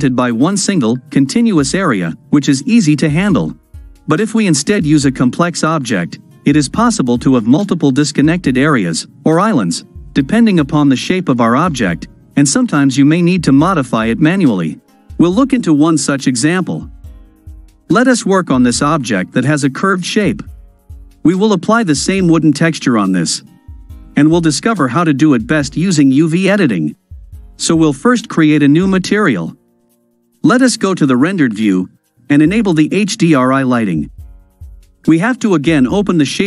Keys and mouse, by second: 19.6-20.5 drag, 20.5-23.6 middle drag, 23.6-24.9 drag, 27.2 click, 28.5 click, 30.8 click, 32.2-33.7 drag, 35.3-35.6 right drag, 35.9 right click, 36.1-36.4 drag.